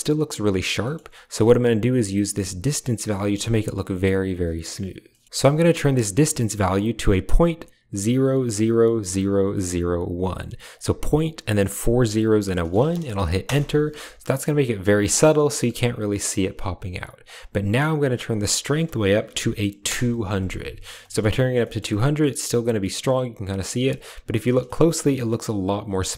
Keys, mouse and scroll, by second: 0.7 middle click, 1.4 click, 5.2-13.4 drag, 18.0-19.8 drag, 19.2 0, 21.0 shift+middle drag, 21.5 shift+middle drag, 24.5 shift+middle drag.